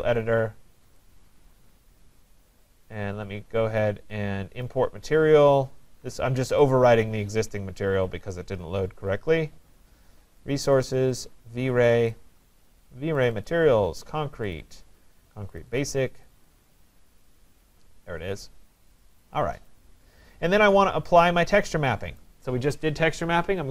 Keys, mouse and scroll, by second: 1.0 right click, 4.7 click, 6.8 click, 10.7 click, 10.9 click, 12.0 click, 12.1 click, 13.3 click, 13.5 click, 14.6 click, 14.8 click, 15.6 click, 15.8 click, 16.3 click, 16.5 click, 19.2 click, 22.2 right click.